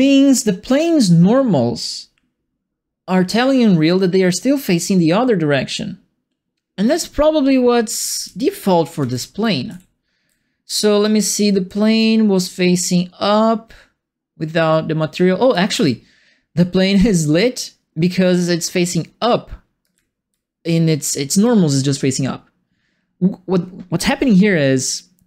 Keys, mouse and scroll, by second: 7.8-10.2 typing, 8.0-15.8 right drag, 11.3 w, 12.4 s, 15.5 d, 19.8-21.4 right drag, 19.9 q.